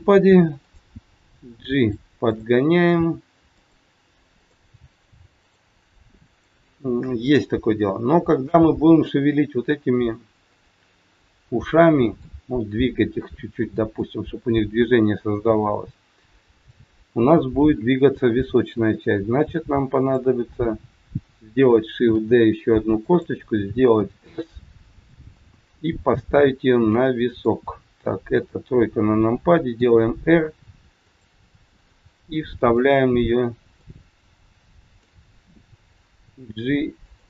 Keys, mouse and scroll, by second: 0.6 click, 1.3 g, 2.2 click, 2.9 g, 4.3 click, 4.6 g, 7.0-7.3 scroll down 2, 7.8 scroll up 1, 8.6 middle click, 10.4 middle click, 15.1 middle click, 15.1 scroll down 2, 15.3 scroll up 1, 16.6 click, 18.7 KP_3, 19.9 click, 22.1 shift+d, 23.8 s, 25.3 middle click, 28.3 KP_3, 29.7 r, 31.4 middle click, 33.2 middle click, 33.2 scroll up 1, 33.9 scroll down 2, 34.8 click, 36.2 g.